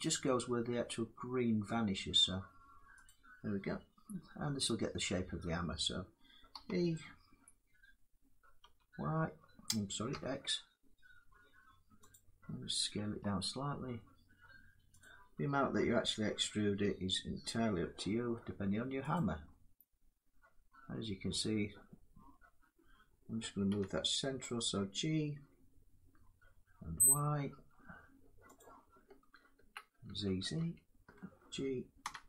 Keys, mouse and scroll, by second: 2.8-7.9 drag, 6.2 e, 8.3 y, 9.8 x, 11.8-14.7 drag, 12.7 s, 15.5 e, 20.5 middle click, 20.8 click, 23.4 g, 26.7 y, 28.3 click, 29.2 ctrl+z, 29.8 ctrl+z, 30.3 ctrl+z, 31.7 g, 32.0 y.